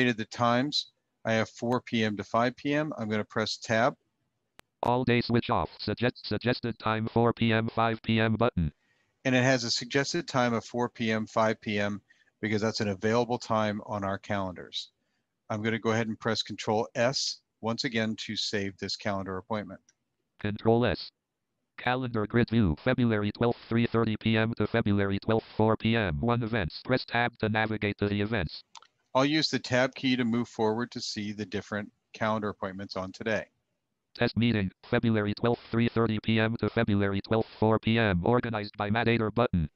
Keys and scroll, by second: 3.2 Tab, 4.8 Tab, 16.0 ctrl+s, 16.5 ctrl+s, 29.4 Tab.